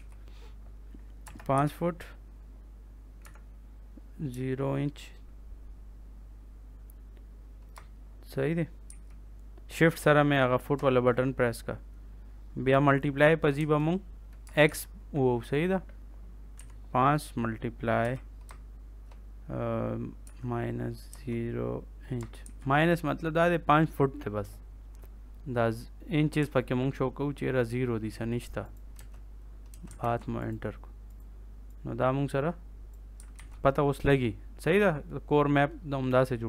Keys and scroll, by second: 1.2 BackSpace, 1.4 ', 3.1 -, 4.2 0, 8.8 shift+', 13.5 space, 14.4 BackSpace, 14.6 x, 16.5 5, 17.9 ', 20.2 -, 21.0 0, 22.3 shift+', 28.9 space, 29.9 ctrl+s, 33.3 ctrl+s.